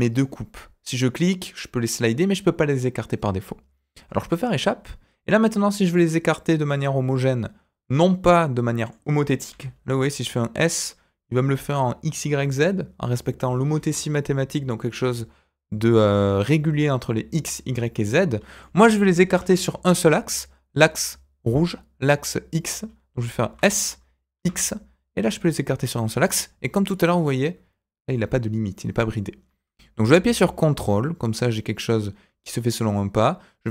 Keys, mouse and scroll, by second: 19.7 KP_7, 23.4 s.